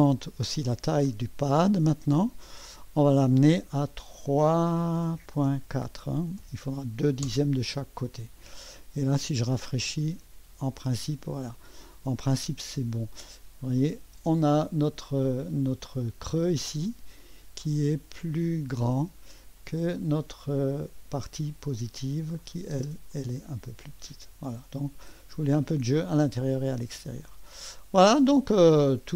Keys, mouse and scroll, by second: 2.6-5.1 drag, 5.1-7.4 typing, 7.2 Return, 10.0-11.4 drag, 11.5-13.1 drag, 13.8 click, 14.2 space, 16.3 click, 17.4-18.9 drag, 18.9 space, 20.0 click, 22.4 click, 22.7 space, 23.1-25.2 drag, 24.1 typing, 25.2 space, 25.3 click, 27.2-28.6 drag, 29.0-29.1 drag.